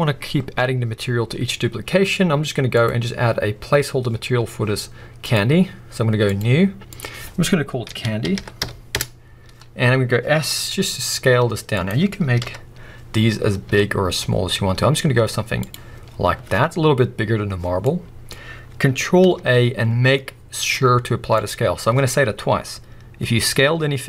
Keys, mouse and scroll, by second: 5.2 click, 6.2-11.9 drag, 9.0 Return, 9.7-10.5 scroll up 1, 10.5 s, 12.4 KP_1, 13.4 scroll up 1, 13.6 s, 15.7 click, 16.0-17.8 scroll down 1, 17.8-24.0 middle drag, 18.5-19.2 scroll up 1, 19.3 ctrl+a, 21.8-24.0 scroll up 1.